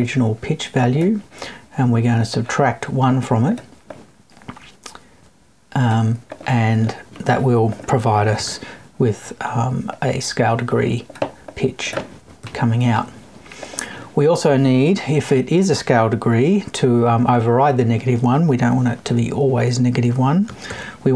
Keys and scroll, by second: 12.4 Left.